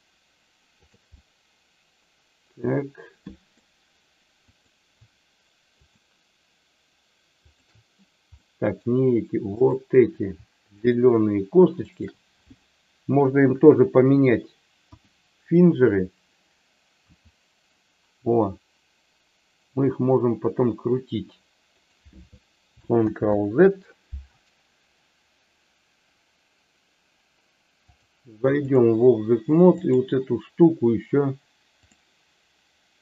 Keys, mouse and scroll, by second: 1.1-3.5 middle drag, 4.5 click, 7.5 shift+click, 8.4 middle click, 9.6 click, 10.7 shift+click, 11.7 shift+click, 14.7 KP_1, 17.0 r, 23.1 ctrl+z, 27.9 click.